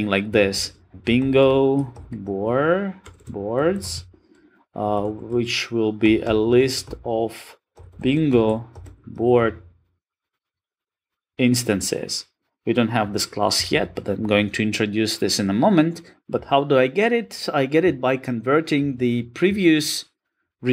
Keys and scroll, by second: 16.1 super+z.